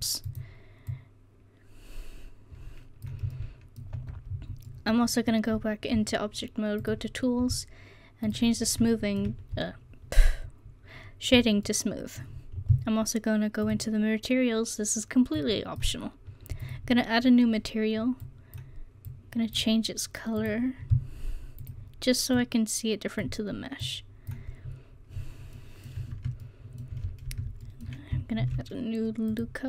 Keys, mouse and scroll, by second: 2.3 click, 2.9 middle click, 3.4-11.3 drag, 4.0 Tab, 11.7-24.4 drag, 24.7 middle click, 26.0 Tab, 28.4 ctrl+r.